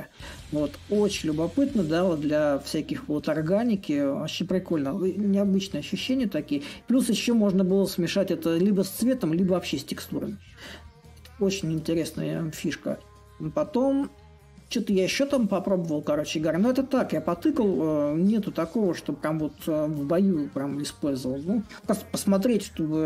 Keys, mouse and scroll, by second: 5.2-10.3 middle drag, 10.9-15.1 middle drag, 15.1-18.0 right drag, 18.0-23.0 drag.